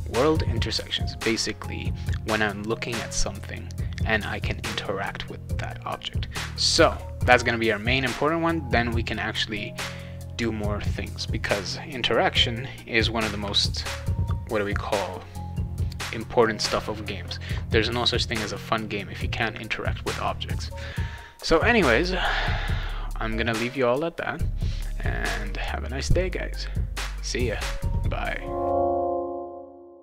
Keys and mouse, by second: 22.7 click.